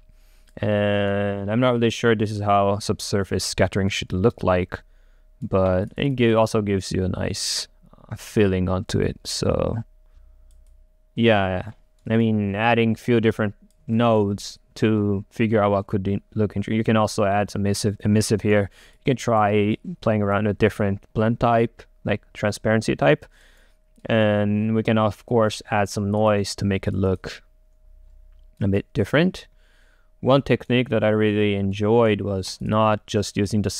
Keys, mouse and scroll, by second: 0.0-1.0 drag, 1.0-3.6 right drag, 4.1-5.9 alt+right drag, 5.9-12.1 drag, 12.1 right click, 12.8-14.0 drag, 14.0-16.4 right drag, 16.4 1, 18.6 right click, 19.0-22.4 drag, 23.6-26.2 right drag, 33.4 click.